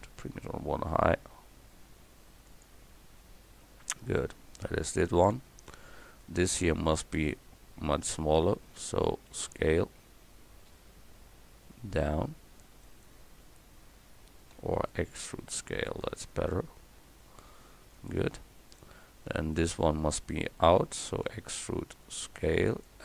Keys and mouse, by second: 6.2-9.3 drag, 9.3 s, 14.6 e, 19.4-21.3 drag, 21.3 e.